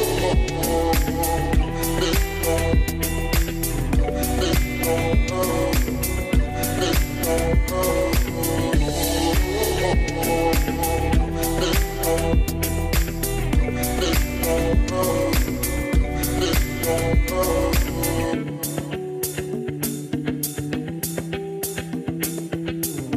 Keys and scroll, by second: 0.7 2, 0.9 Return, 22.7 BackSpace, 23.0 5.